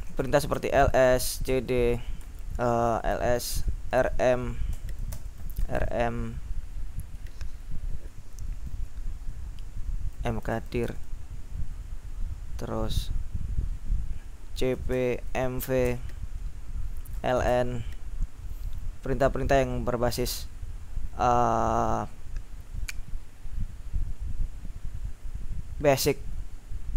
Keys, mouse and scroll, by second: 0.1-2.3 typing, 3.8-5.9 typing, 10.0-11.3 typing, 14.4-17.6 typing.